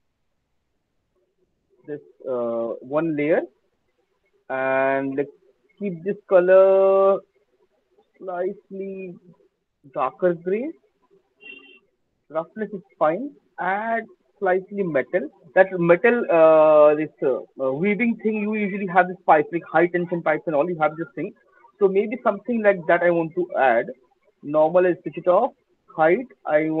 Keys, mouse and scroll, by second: 1.2 click, 7.3 click, 10.1 click, 10.7 click, 15.5 click, 23.0-24.5 scroll, 24.5 click, 24.9 scroll, 24.9 middle click, 25.2 middle click.